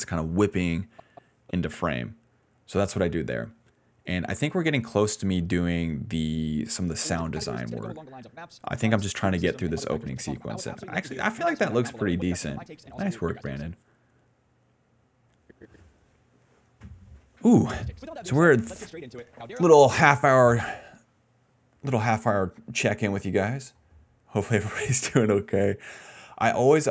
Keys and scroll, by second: 2.9 s, 3.0 s, 4.8 d, 5.4 s, 5.6 s, 6.3 ctrl+s, 6.7 d, 6.9 space, 7.2 d, 7.7 d, 8.8-11.8 typing, 13.1 d, 13.6 space, 16.3 a, 17.5 space, 17.8 d, 18.5 s, 20.0 space, 20.4 space, 20.9 space, 21.5 s, 22.6 ctrl+s, 22.8 ctrl+s, 23.0 ctrl+s.